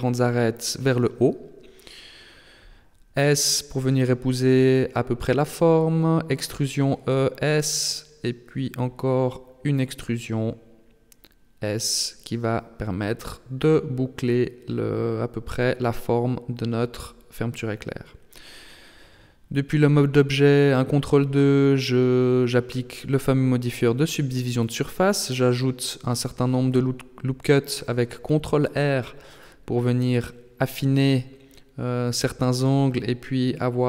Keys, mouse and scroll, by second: 0.4 e, 3.4 s, 5.3 e, 7.4 s, 11.3 e, 13.4 s, 17.8 z, 18.4 Tab, 19.9 ctrl+2, 21.0 scroll up 1, 21.4 Tab, 22.6 ctrl+r, 25.2 ctrl+r, 29.1 alt+right click, 30.5 s, 33.4 alt+right click.